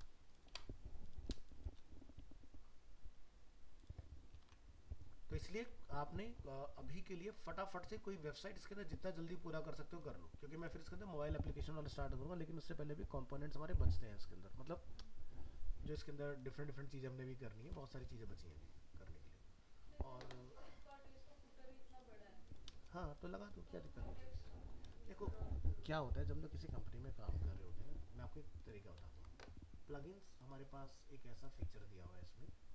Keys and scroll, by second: 4.4 alt+Tab.